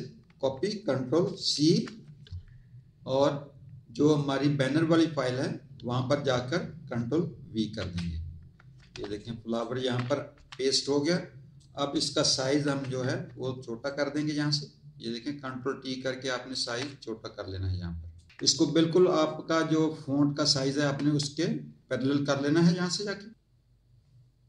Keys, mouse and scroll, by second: 1.5 ctrl+c, 4.0 click, 7.5 ctrl+v, 8.7 z, 9.1 alt+click, 9.5 alt+click, 11.0 click, 12.5 ctrl+t, 13.8 shift+click, 16.8 click, 18.3 ctrl+t, 19.2 shift+click, 21.9 shift+click.